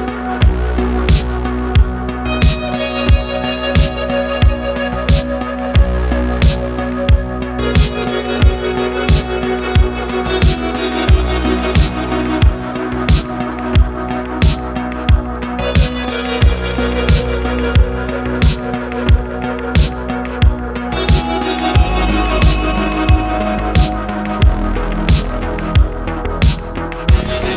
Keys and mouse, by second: 0.5-3.7 drag, 4.4 middle click, 5.0 click, 7.0 click, 9.1 middle drag, 9.5 middle drag, 10.3 shift+middle click, 10.7 middle click, 11.2 middle click, 11.6 middle click, 12.2-12.6 ctrl+middle drag, 13.1 click, 13.7 shift+middle click, 15.2 shift+click, 15.9 shift+middle drag, 16.4 middle click, 16.7 middle click, 17.1 middle click, 17.8 e, 18.0 y, 18.3 x, 19.3 click, 19.5 middle click, 20.0 middle click, 21.1 click, 21.8 middle click, 22.7 click, 23.9 click, 24.6-27.5 drag.